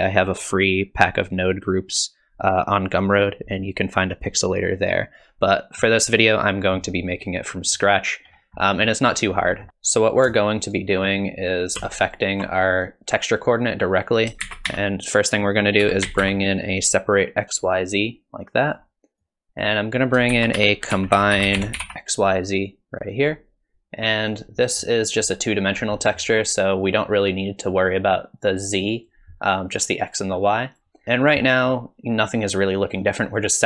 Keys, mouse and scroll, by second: 7.8-8.8 scroll up 7, 8.7 middle click, 8.8-9.7 scroll down 6, 9.5 middle click, 9.7 ctrl+z, 10.4 shift+right click, 12.1 ctrl+shift+click, 14.1 click, 14.5 shift+a, 19.2 click, 20.0 click, 20.3 shift+a, 24.8 middle click, 25.7-26.9 scroll up 2, 26.0 middle click, 27.9 click, 30.2 click, 31.0 middle click, 31.0-31.5 scroll down 2.